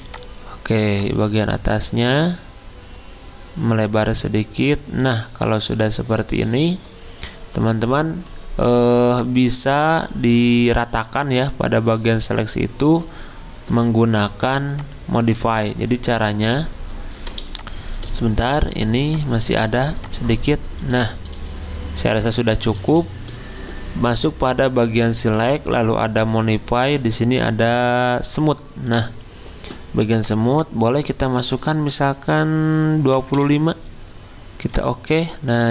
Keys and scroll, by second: 32.9-34.6 typing.